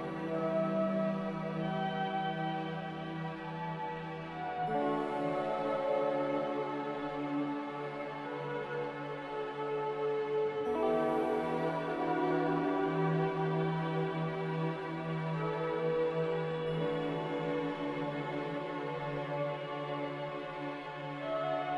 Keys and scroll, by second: 6.3 b, 8.4-10.0 typing, 14.4 b, 18.7 Delete, 19.2 n.